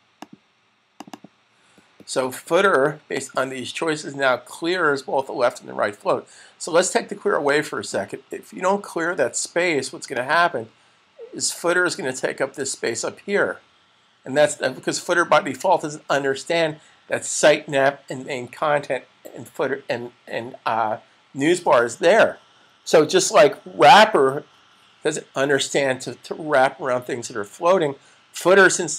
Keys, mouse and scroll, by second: 1.1 double click, 3.0 click, 7.5 click, 10.1 click.